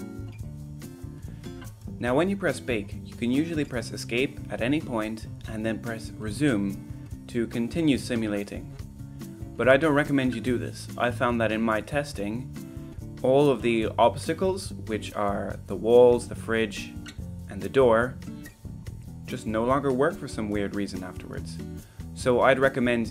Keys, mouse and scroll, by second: 0.0 click, 1.5 drag, 2.4-2.8 middle drag, 7.2 click, 7.7-12.9 drag, 13.3-13.7 middle drag, 15.0 middle click, 16.1-18.3 drag, 18.8-20.1 middle drag.